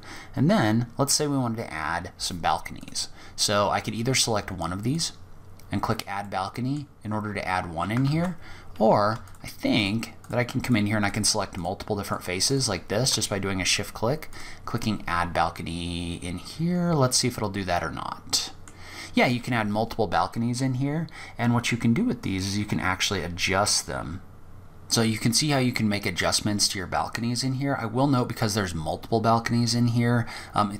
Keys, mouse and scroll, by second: 2.0 click, 4.1 click, 5.4 middle click, 7.3 ctrl+z, 9.0 shift+click, 9.4 shift+click, 9.8 shift+click, 10.3 shift+click, 10.8 shift+click, 11.2 shift+click, 11.6 shift+click, 13.5 click, 17.4 scroll down 2, 17.5 middle click, 21.4 click, 24.3 middle click, 24.3 scroll down 4, 25.7 scroll down 2, 30.0-30.5 scroll down 1.